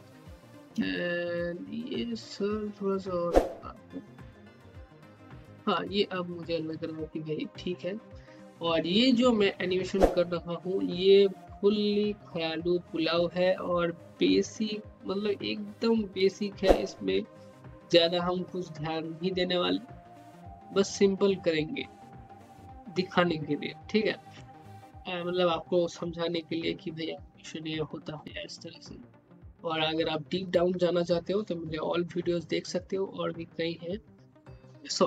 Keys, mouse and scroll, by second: 0.2 scroll up 1, 0.7 alt+middle click, 1.2-2.1 scroll down 1, 2.1-4.8 drag, 5.1 scroll down 1, 5.4 alt+middle click.